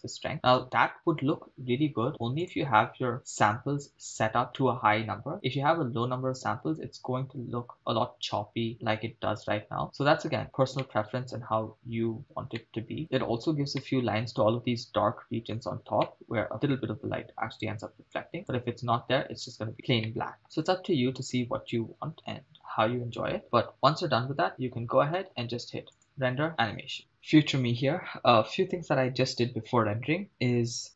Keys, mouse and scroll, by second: 2.5 drag, 3.2-3.7 scroll up 2, 6.7 scroll up 5, 9.2-10.4 scroll down 8, 11.0 shift+middle click, 11.7-12.4 scroll down 2, 12.8 shift+middle click, 13.0-13.5 scroll up 3, 13.9-14.5 shift+middle drag, 15.3-16.0 scroll up 2, 16.2-16.5 shift+middle drag, 18.1 click, 19.7 scroll down 3, 20.2 shift+middle click, 20.4-21.4 scroll down 1, 22.5 right click, 23.4 shift+space, 25.5 shift+space, 26.1-27.0 drag, 30.3 KP_0.